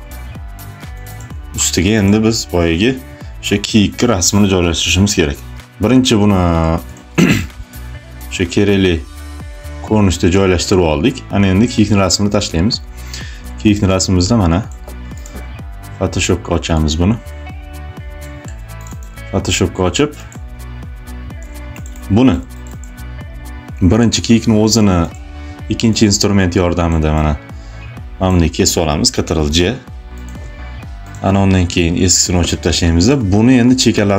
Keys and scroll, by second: 17.5 space, 28.9 ctrl+j, 31.5 Delete, 33.7 space.